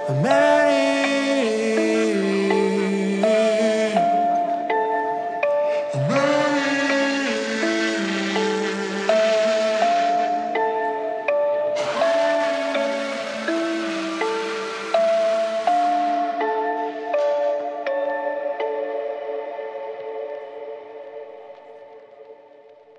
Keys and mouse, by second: 12.4 click, 13.3 click, 14.6 click, 17.0 ctrl+middle click, 17.2 shift+middle click, 17.6-18.4 middle drag.